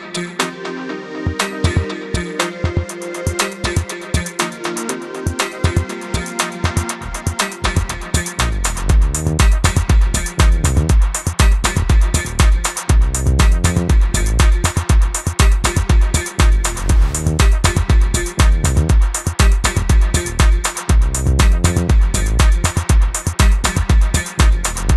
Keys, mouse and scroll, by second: 0.1 KP_0, 0.4 KP_Enter, 1.3 click, 2.3 space, 2.3 click, 2.4 space, 2.7 click, 3.8 click, 4.6 Delete, 4.8 click, 6.8 click, 13.4 Delete, 13.5 click, 14.7 click, 15.5 ctrl+alt+click, 16.4 click, 17.0 click, 18.5 ctrl+alt+click, 19.3 click, 20.0 click, 24.2 ctrl+0.